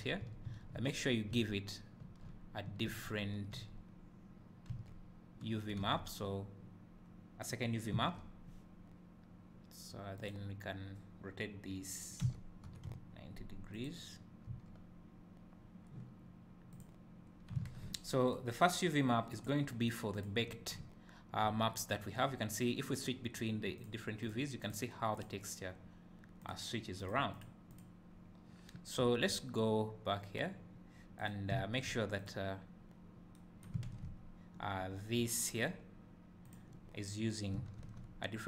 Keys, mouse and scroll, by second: 5.9 Tab, 7.5 click, 8.0 Tab, 10.3 click, 12.4 r, 14.6 Tab, 16.8 click, 20.2 click, 23.8 click, 24.2 click, 24.6 click, 27.0 click, 27.3 click, 27.7 click, 31.2 click, 32.2 click, 36.4 click.